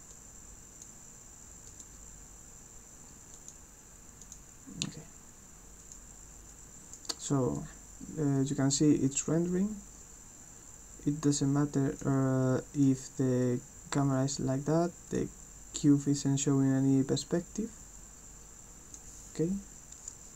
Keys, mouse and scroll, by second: 0.1 click, 1.7 click, 3.3 click, 4.2 click, 5.8 click, 6.5 click, 7.6-12.0 drag, 12.7 click, 15.1 click, 16.0-19.0 drag.